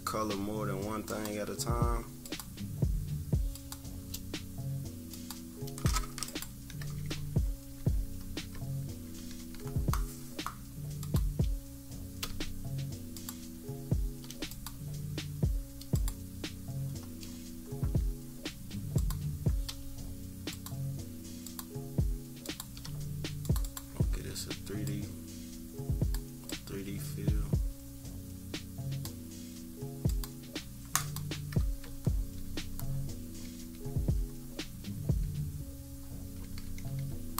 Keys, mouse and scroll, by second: 1.0 shift+click, 2.2 shift+click, 3.5 shift+click, 5.1 click, 6.2 click, 7.2-9.4 typing, 8.3 scroll down 2, 9.7 scroll up 2, 11.0 click, 13.1-14.2 shift+drag, 14.5 click, 15.9 click, 16.7-17.7 scroll down 1, 18.2 scroll down 1, 18.9 click, 21.4 shift+click, 22.5 shift+click, 23.6 click, 24.8-26.2 drag, 26.5-29.0 drag, 30.0 click, 30.9 click, 31.8 -, 32.1 -, 32.3 -, 32.8-33.3 scroll up 2, 33.4 =, 33.7 =, 34.3-35.6 scroll up 4, 35.6 scroll up 1, 35.9-36.3 scroll down 2, 36.4 =, 36.6 =, 36.9 scroll up 2, 37.2-37.3 scroll down 4.